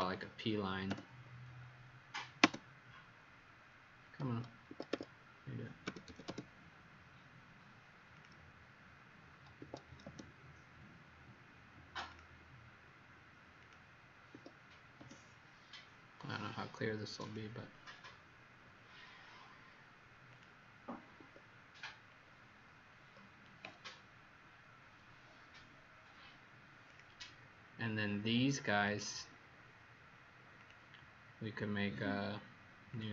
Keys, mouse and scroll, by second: 0.0-0.2 typing, 4.2 Escape, 4.6 Escape, 4.9 Escape, 5.5-6.5 typing, 8.1 click, 9.5 Escape, 12.0 click, 14.4 Escape, 17.2 click, 21.2 Escape, 22.1 scroll down 2, 26.1 scroll up 1, 26.8 click.